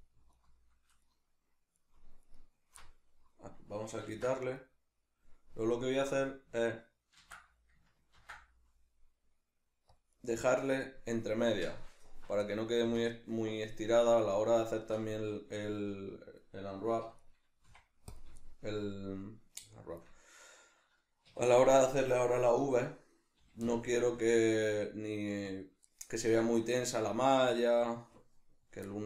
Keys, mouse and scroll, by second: 0.3 alt+right click, 1.0 alt+shift+right drag, 1.7 alt+shift+right click, 2.3 alt+shift+right click, 2.8-5.7 middle drag, 4.1 ctrl+x, 5.7 alt+right click, 7.2 ctrl+x, 10.3 right click, 12.5-17.2 middle drag, 17.1 3, 17.2 right click, 17.6 x, 18.5-21.6 shift+middle drag, 21.3 1, 21.6 right click, 23.4 g, 25.6 click, 26.4-29.0 shift+middle drag.